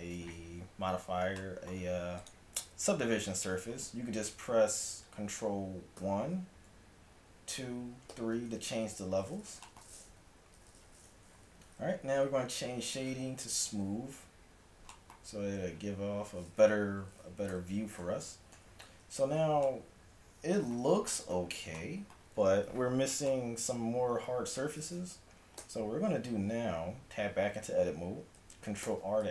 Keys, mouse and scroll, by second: 2.3-4.0 drag, 6.0 ctrl+1, 7.6 ctrl+2, 8.2 ctrl+3, 10.2 Tab, 11.6 t, 13.7-14.8 drag, 17.6 t, 18.6 a, 25.6 Tab, 26.4 a, 28.9 ctrl+r.